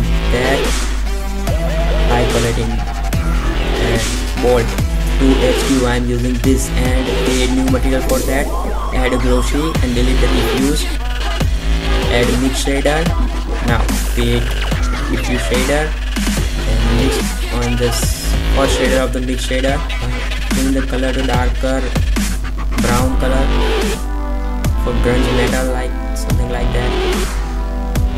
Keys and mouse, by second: 6.9 r, 7.8 middle click, 9.5 shift+a, 11.1 Delete, 11.7 shift+a, 15.2 shift+a, 22.9 KP_1, 24.3-25.1 drag, 25.3 s, 25.8 r, 26.2 r, 27.2 g.